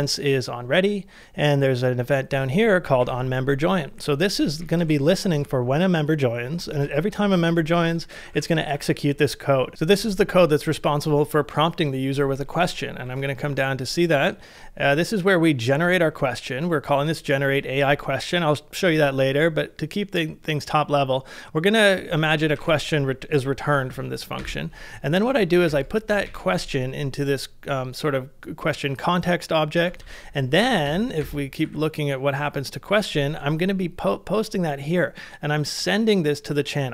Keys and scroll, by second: 2.8 typing, 4.6 shift+k, 5.4 ctrl+c, 6.7 shift+v, 8.0-8.7 typing, 9.6 ctrl+c, 13.0 ctrl+d, 22.0-23.0 typing, 23.9 ctrl+c, 24.4-26.2 typing, 30.1 ctrl+c, 30.9 shift+8, 31.2 shift+8, 31.6 shift+8, 32.4 shift+8.